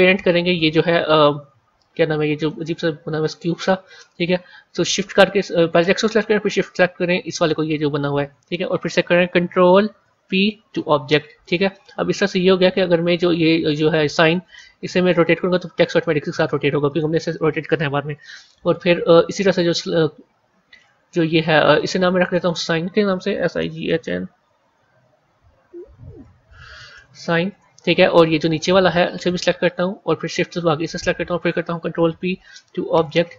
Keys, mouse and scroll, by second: 2.3 click, 4.2 ctrl+z, 7.5 shift+click, 9.9 ctrl+p, 12.2-14.6 scroll up 2, 14.6 r, 17.6-20.6 middle drag, 22.1 click, 22.3-25.3 drag, 26.1 BackSpace, 29.0 click, 30.8 shift+click, 31.8 ctrl+p.